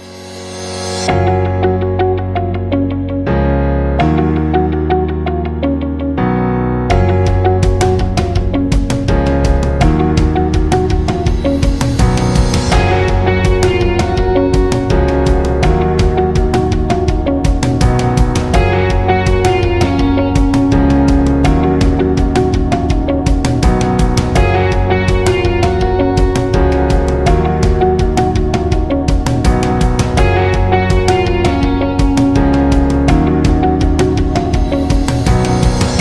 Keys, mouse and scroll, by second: 3.9 space, 4.2 scroll up 1, 4.5 space, 4.6-6.0 drag, 8.2-24.1 drag, 27.2 alt+scroll up 1, 27.5 space, 27.6 click, 28.0 space, 29.2 alt+scroll down 1, 29.4 space, 29.6 click, 31.8 i, 33.5 click, 33.6 i, 34.2 click, 34.7 v.